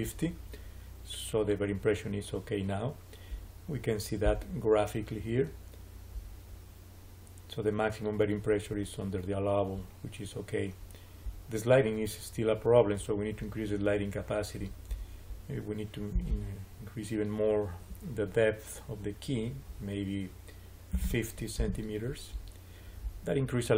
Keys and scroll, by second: 20.6-21.4 typing, 21.5 Return.